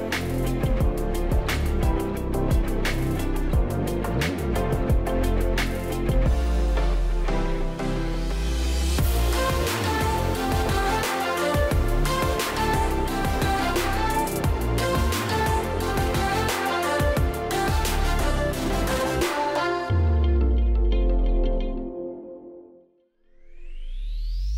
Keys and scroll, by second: 2.0 Delete, 5.8 1, 7.2 BackSpace, 7.8 2, 8.4 Tab, 8.9 2.